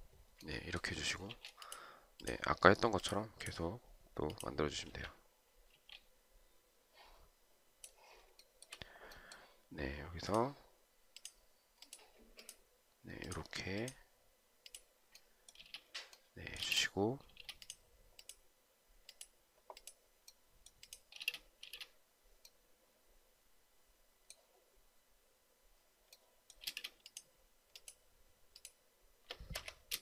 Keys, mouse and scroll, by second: 1.4 space, 5.0 space, 5.9 space, 8.7 shift+right click, 15.9 space, 17.0 space, 17.8 space, 21.4 space, 22.0 space, 27.0 space, 29.9 Escape.